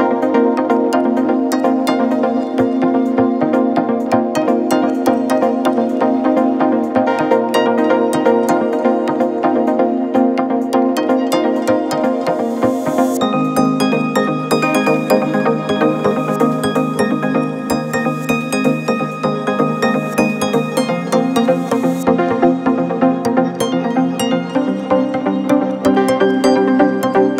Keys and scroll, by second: 16.5 ], 17.0 ].